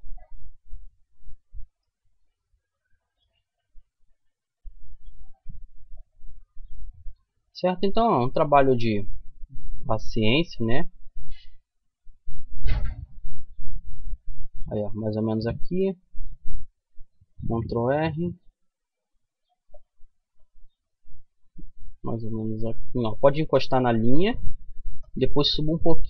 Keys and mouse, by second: 2.1-4.4 middle drag, 4.4 ctrl+r, 14.5-16.5 middle drag, 16.5 ctrl+r.